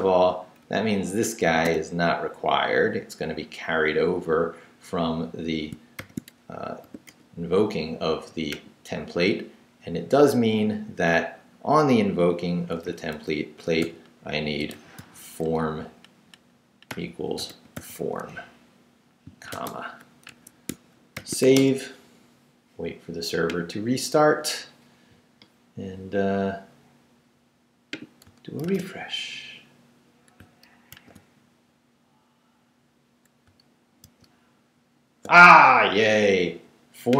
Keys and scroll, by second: 0.3 Down, 0.6 Up, 1.5 d, 6.0 shift+;, 6.8 shift+w, 7.1 Return, 10.0 Down, 10.6 Right, 12.8 Right, 13.1 Left, 13.8-15.5 typing, 16.6-19.5 typing, 20.3 Escape, 21.1 shift+;, 21.4 shift+w, 21.5 Return, 28.6 super+r, 30.9 super+r, 34.0 super+r.